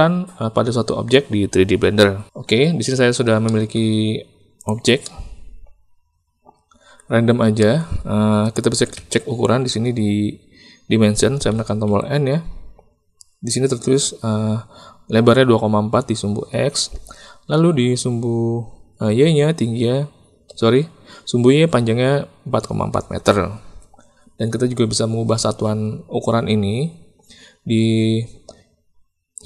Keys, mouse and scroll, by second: 3.4 middle click, 4.6 click, 5.0-7.0 drag, 7.5 shift+click, 8.9 n, 11.5 n, 11.8 n.